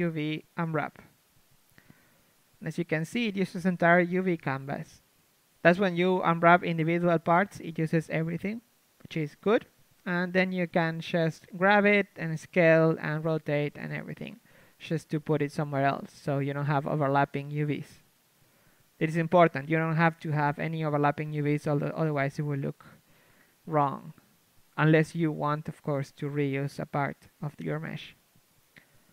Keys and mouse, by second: 1.1 u, 2.5 a, 2.8 a, 3.1 a, 6.4 KP_1, 8.7 s, 9.8 click, 9.8 right click, 10.5 l, 11.1 right click, 11.8-13.6 typing, 13.6-16.9 drag, 17.6 Tab, 18.3 KP_3, 19.5 Tab, 19.5 middle click, 20.5 s, 21.7-24.0 drag, 21.7 g, 22.4 s, 23.1 Tab, 25.1 Tab, 25.6 s, 26.5-28.0 drag, 27.1-29.1 typing.